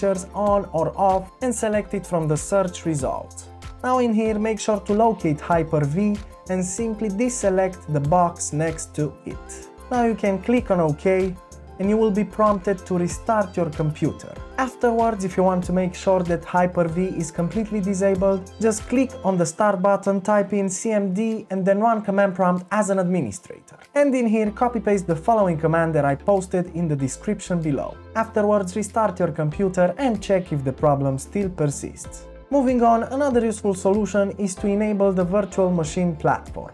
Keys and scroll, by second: 19.6-20.4 typing, 27.8 typing, 30.3 typing.